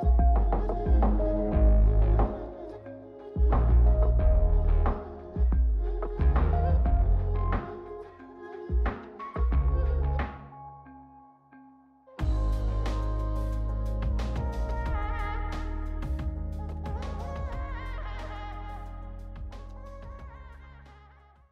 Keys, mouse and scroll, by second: 2.1 middle click, 3.1-8.1 drag, 9.8-16.4 drag, 16.8-20.3 drag.